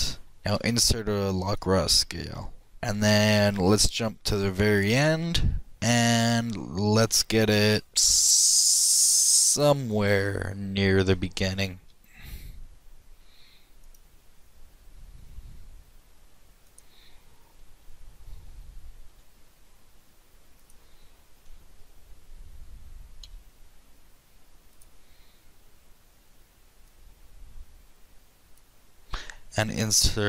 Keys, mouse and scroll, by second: 0.7 i, 3.5-5.4 drag, 5.7 click, 6.5-7.9 middle drag, 7.9 g, 10.6 KP_7, 11.8 ctrl+z, 11.8 g, 15.3 r, 17.8 KP_3, 19.1 r, 21.4 KP_1, 23.3 r, 26.9-28.8 drag, 29.6 i.